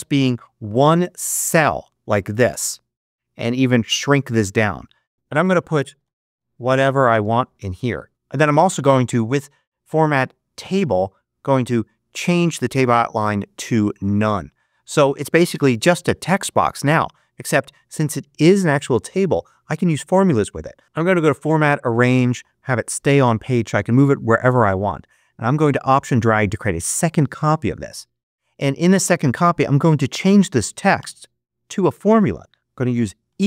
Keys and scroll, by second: 5.1 super+BackSpace, 5.5-7.6 typing, 30.9 BackSpace, 33.1 =.